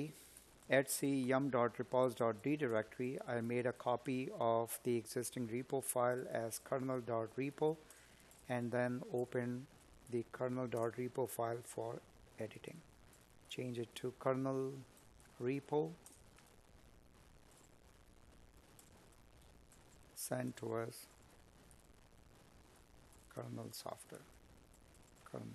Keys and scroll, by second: 0.2 Tab, 1.7 space, 2.8 Tab, 6.5 space, 8.2 Tab, 10.5 space, 13.8 Escape, 22.0 Escape, 25.3 Escape.